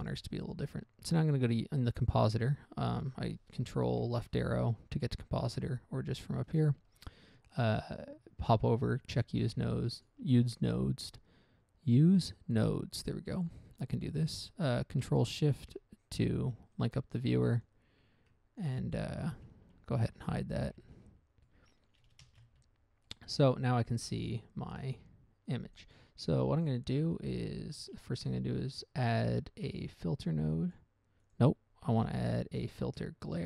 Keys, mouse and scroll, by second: 1.6 click, 5.8 click, 6.8 right click, 10.3 click, 15.8 ctrl+shift+click, 17.1 click, 17.5 click, 18.0 click, 18.9 click, 20.0-20.5 scroll down 1, 20.0 n, 20.9 v, 21.1 v, 21.3 v, 21.8 middle click, 22.3 middle click, 22.6 shift+space, 22.9 scroll up 1, 23.4 middle click, 23.7 middle click, 24.8 scroll down 1, 25.0 middle click, 25.3 middle click, 25.8 click, 26.1 click, 26.6 click, 27.0 click, 27.3 middle click, 27.6 scroll up 1, 28.1 shift+a, 31.1 click, 31.6 click, 31.7 click, 32.2 x, 32.8 shift+a.